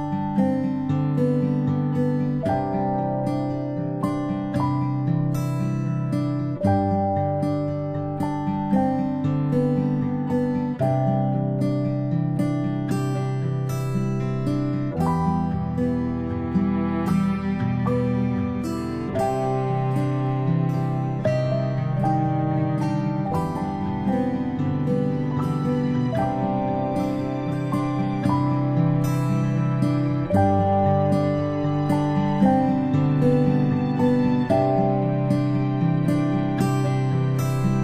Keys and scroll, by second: 7.0 ctrl+z, 17.3 ctrl+z, 17.9-18.2 space, 29.7 ctrl+z, 35.0 ctrl+z.